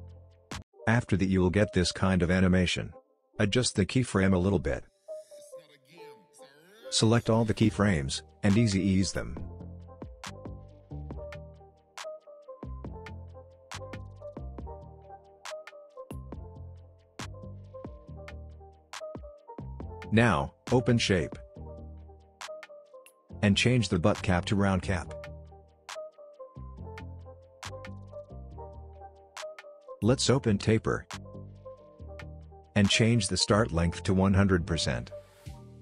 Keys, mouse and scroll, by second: 0.3 space, 2.4-4.6 drag, 5.0 space, 6.3-7.5 click, 7.8 right click, 10.3 right click, 11.3 click, 16.1-16.4 click, 16.3 space, 18.6-19.8 drag, 25.6 click, 27.1-29.0 scroll up 1, 29.8 scroll up 1, 29.8-31.6 scroll down 2, 32.0-35.2 drag.